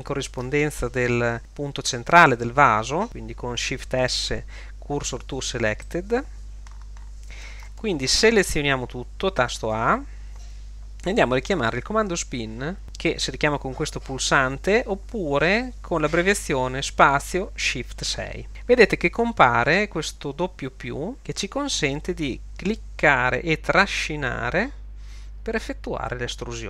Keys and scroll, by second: 4.1 shift+s, 9.8 a.